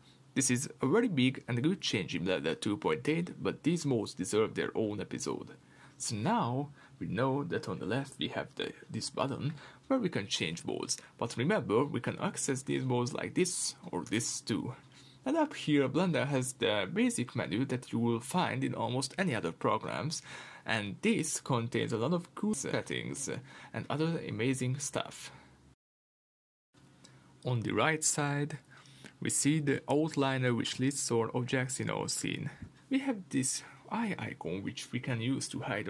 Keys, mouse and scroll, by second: 5.1 click, 16.3-30.5 drag, 21.7 Tab, 31.0-35.8 middle drag, 31.5 scroll down 1.